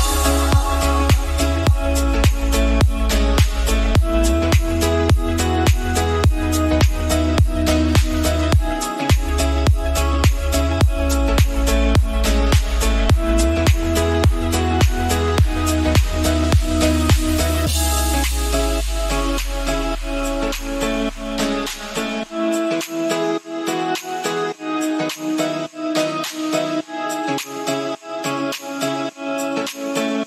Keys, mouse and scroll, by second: 0.3 scroll down 2, 0.4 shift+middle click, 0.9-3.2 drag, 3.2-3.6 scroll up 1, 3.6 KP_Decimal, 3.9 scroll down 3, 4.1 middle click, 4.5 s, 6.0-6.6 scroll up 3, 6.6-9.9 drag, 9.9 ctrl+z, 10.4 click, 10.6-16.3 drag, 16.3-17.3 middle drag, 17.3 r, 19.5 s, 21.1 middle click, 22.0 scroll down 2, 22.3 s, 23.5 KP_7, 23.8 s, 26.3 shift+d, 27.2 s, 28.3-29.7 middle drag, 29.8 middle click.